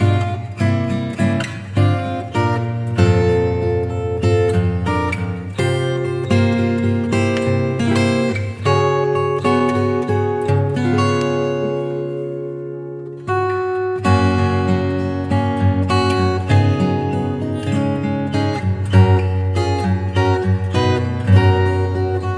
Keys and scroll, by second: 6.5 Return, 15.5 Return.